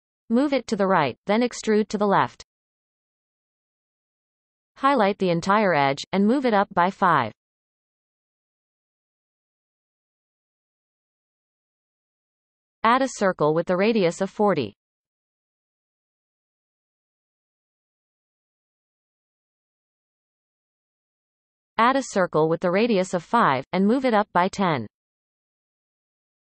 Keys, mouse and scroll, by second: 2.4 e, 8.6 shift+click, 9.5 g, 13.3 shift+a, 18.5-22.5 drag, 25.2 shift+a.